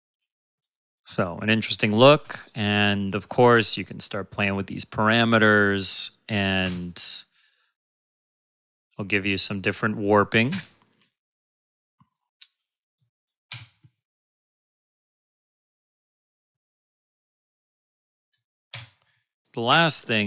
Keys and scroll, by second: 2.2 space, 6.6 space, 10.4 space, 13.4 space, 18.7 space.